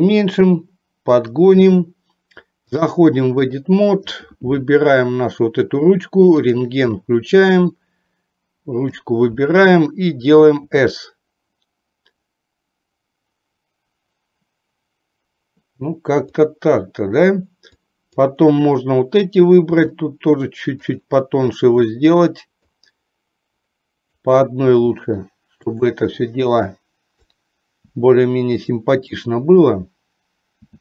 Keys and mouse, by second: 2.7-3.8 drag, 8.0 click, 10.8 s, 18.0 click, 19.8 s, 22.9-24.2 drag, 24.9 s, 26.7 click, 28.0 s, 29.4 click, 30.7 s.